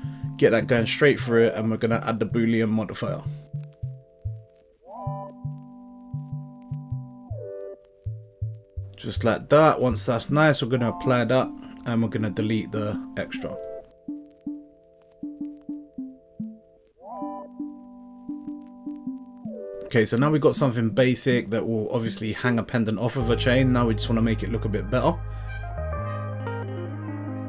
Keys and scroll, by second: 0.3 x, 14.7 Delete, 22.8 Tab.